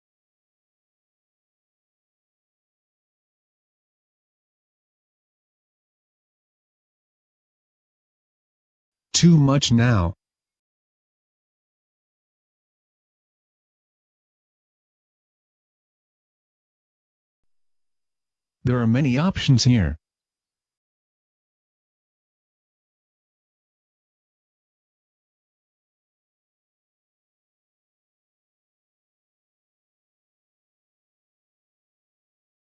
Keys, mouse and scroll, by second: 8.8 Escape, 9.7 click, 10.2 click, 10.7 click, 11.0 click.